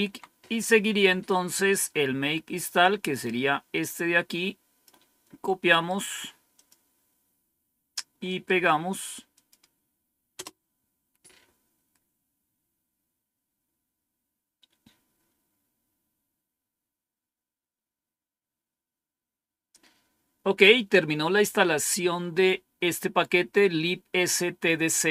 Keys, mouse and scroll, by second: 0.0 Down, 2.7-5.5 drag, 5.8 right click, 6.5 click, 8.2 right click, 9.3 click, 9.9 click, 10.3 Return.